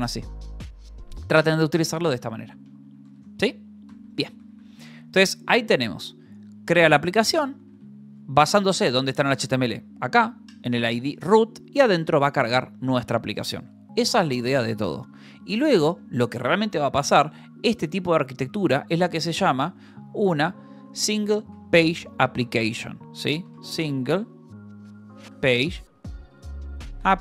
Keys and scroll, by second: 0.3-7.8 typing, 1.7 Escape, 4.7 Escape, 11.3 j, 11.9 j, 12.6 shift+v, 12.9 Escape, 16.0 ctrl+h, 16.4 j, 17.0 k, 19.1 ctrl+l, 19.5-27.2 typing, 22.6 Left.